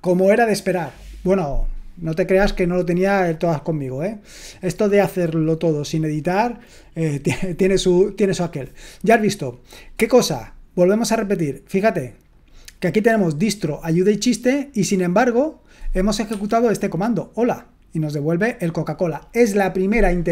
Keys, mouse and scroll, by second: 16.3 Escape, 16.3 click.